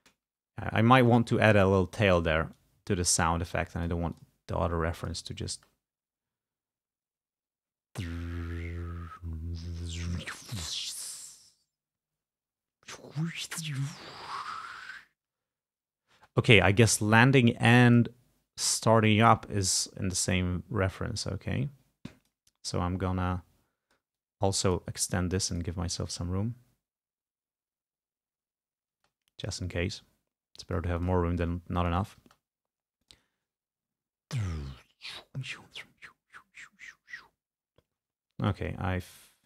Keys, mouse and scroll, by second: 0.6 ctrl+scroll down 2, 1.4 ctrl+scroll down 2, 1.8 ctrl+click, 2.6-4.1 drag, 4.2 click, 5.0 click, 5.6 space, 16.2 space, 16.9 click, 17.9 click, 19.2-22.6 drag, 22.8-24.2 drag, 25.6 click, 26.0 space, 29.0 space, 29.1 click, 29.8-31.0 drag, 31.8-32.9 drag, 32.3 space, 33.1 click, 38.4 space, 39.2-39.4 drag.